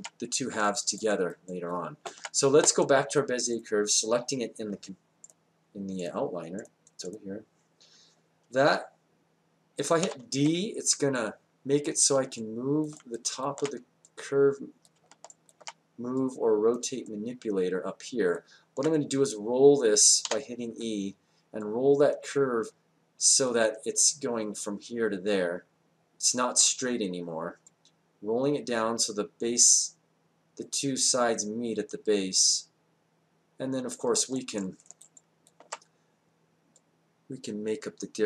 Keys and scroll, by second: 10.0 d, 20.2 e.